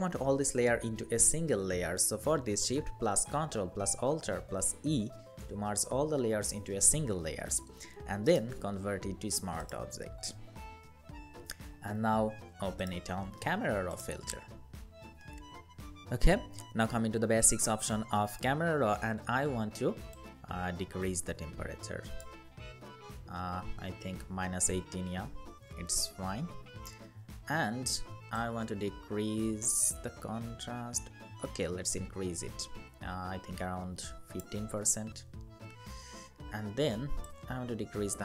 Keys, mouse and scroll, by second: 4.7 ctrl+alt+shift+e, 8.0 right click, 22.2 Down, 22.6 Down, 22.9 Down, 23.3 Down.